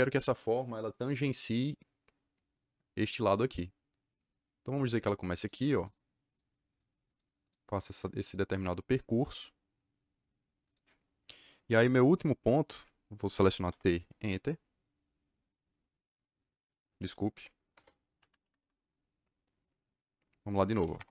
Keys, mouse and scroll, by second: 5.3 click, 6.2 click, 6.6 click, 7.0 click, 7.4 click, 7.7 click, 8.2 click, 10.6 click, 13.6 t, 13.9 KP_Enter, 17.3 u, 17.7 Return, 18.1 Escape, 18.3 Escape, 18.5 Escape, 20.4-21.1 typing.